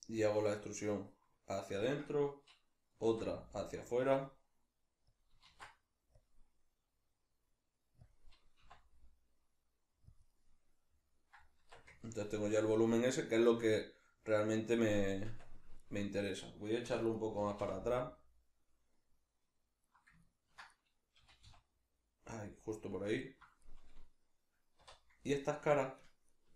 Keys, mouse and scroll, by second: 1.9 click, 3.0 alt+e, 5.2 click, 5.5 alt+e, 8.1 click, 8.7 i, 10.2 click, 10.3-12.7 middle drag, 11.6 Tab, 15.2 Tab, 15.8 shift+middle click, 16.3 right click, 16.8 l, 17.1-19.6 middle drag, 17.4 g, 19.6 click, 19.8-22.6 middle drag, 21.2 g, 22.6 click, 22.7-25.3 middle drag, 24.8 3, 25.3 right click, 25.8 ctrl+right click, 26.0 ctrl+right click, 26.3 ctrl+right click.